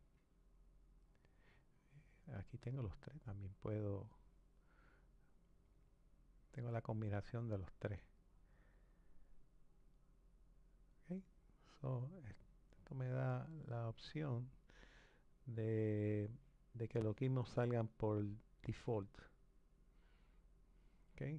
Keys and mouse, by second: 0.1 click, 2.8 click, 5.5 click, 7.3 click, 14.1-17.2 drag.